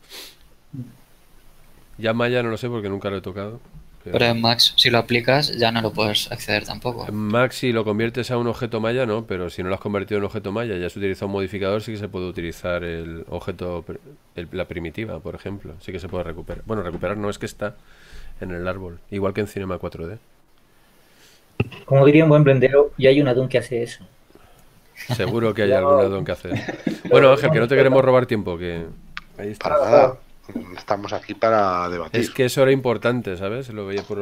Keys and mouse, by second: 1.8 KP_Decimal, 4.8 click, 7.5 KP_Decimal.